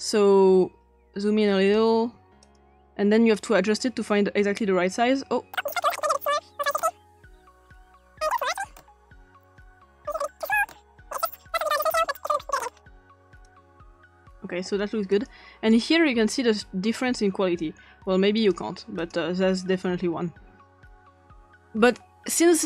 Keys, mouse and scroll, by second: 0.0-1.8 drag, 2.4 click, 3.3 click, 5.8 click, 6.2 click, 6.6 typing, 6.8 Return, 7.4 click, 8.4 click, 8.6 5, 8.7 Return, 8.7 5, 9.4 drag, 9.6 click, 10.2 click, 10.6 6, 10.7 Return, 11.3 drag, 11.5 click, 12.1 click, 12.5 7, 12.6 Return, 13.2 drag, 13.4 click, 15.1 click, 15.7 click, 18.4 click, 19.0 click, 21.0 click.